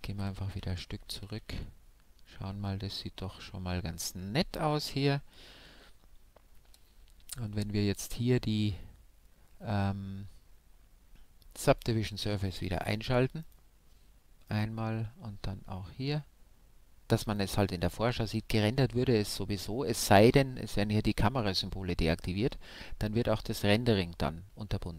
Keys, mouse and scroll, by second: 2.2 Left, 5.6 Home, 11.7-13.4 drag, 13.6-15.1 drag, 14.9-16.4 right drag, 17.4-18.9 drag.